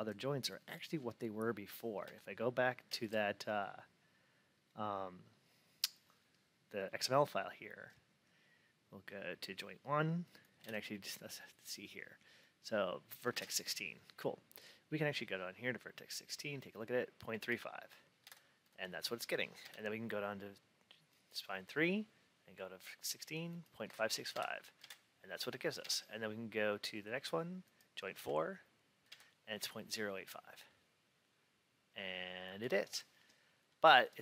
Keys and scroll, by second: 1.9 alt+Tab, 10.5 alt+Tab, 18.1 alt+Tab, 23.8 alt+Tab.